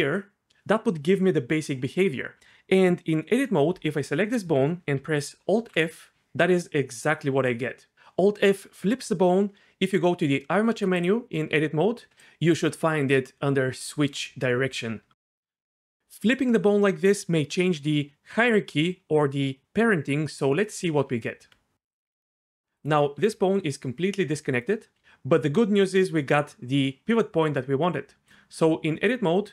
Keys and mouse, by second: 5.6 alt+f, 10.9-12.1 drag, 21.0 Tab, 22.1 g, 23.2 g, 25.0 r, 25.4 r, 28.6 Tab.